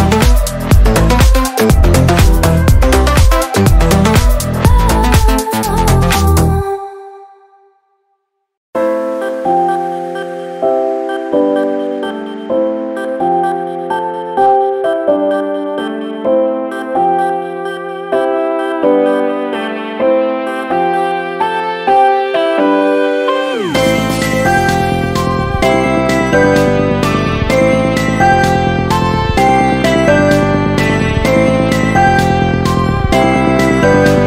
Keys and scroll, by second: 0.5 ctrl+z, 3.6 ctrl+-, 8.5 ctrl+z, 10.4 ctrl+z, 16.5 ctrl+z, 17.9 ctrl+z, 19.1 ctrl+-, 19.5 ctrl+z, 21.4 ctrl+-, 27.7 ctrl+z, 31.8 ctrl+z, 32.3 ctrl+-, 32.5 ctrl++, 33.0 ctrl+z.